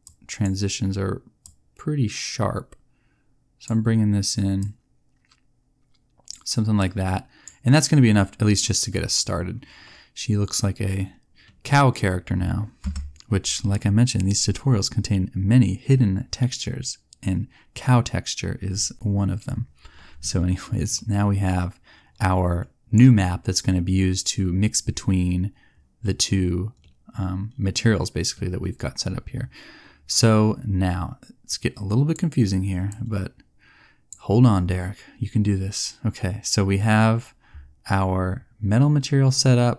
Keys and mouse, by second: 12.0 middle click, 12.8 KP_0.